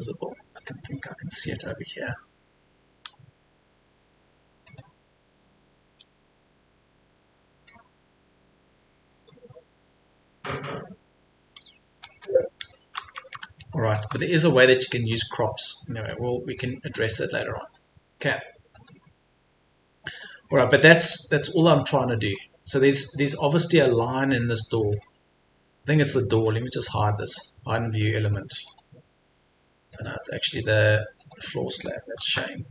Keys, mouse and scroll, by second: 0.5 click, 3.1 Tab, 4.7 click, 6.5-7.1 scroll down 1, 7.1 Escape, 7.7-9.4 drag, 9.9 Escape, 12.3 Tab, 13.9 Escape, 14.3-14.8 scroll down 1, 14.8-16.0 scroll up 1, 16.0 click, 20.2-20.5 scroll down 1, 21.4 middle click, 22.3-22.9 scroll up 1, 24.9 click, 26.3 right click, 28.3 click.